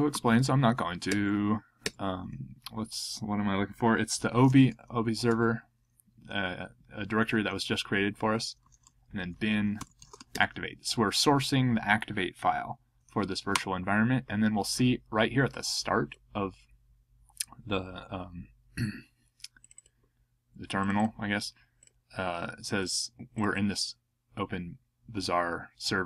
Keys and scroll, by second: 0.0-1.5 typing, 4.0-5.4 typing, 8.4-11.0 typing, 13.5 Return.